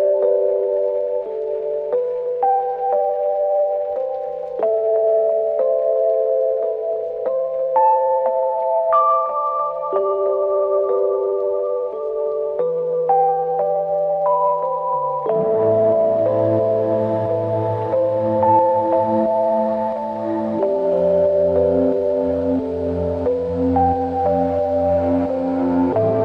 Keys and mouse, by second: 0.4 double click, 5.8 alt+click, 7.4 alt+click, 8.1 shift+click, 10.1 ctrl+alt+click, 12.7 ctrl+alt+click, 14.2-14.9 typing, 15.9 double click, 24.5 ctrl+alt+click.